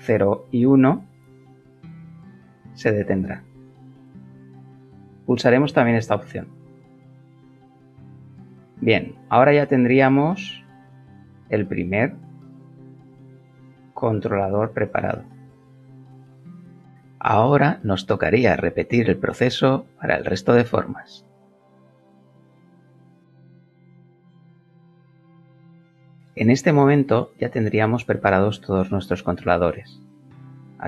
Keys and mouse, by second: 2.9 Escape, 5.9 click, 13.1 g, 25.0 KP_0.